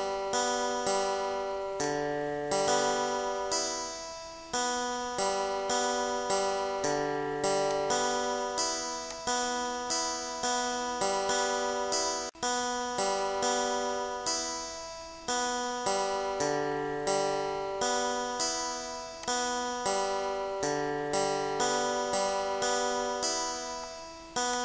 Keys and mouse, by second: 0.2 click, 1.1 click, 1.9 ctrl+z, 2.4 click, 3.0 click, 3.8 click, 4.4 click, 4.9 click, 6.5 click, 9.8 Delete, 10.6 ctrl+z, 10.8 click, 11.6 click, 12.6 click, 13.2 click, 14.7 click, 15.4 click, 16.1 click, 17.4 Delete, 18.9 click, 22.4 click, 23.4 click, 24.4 click.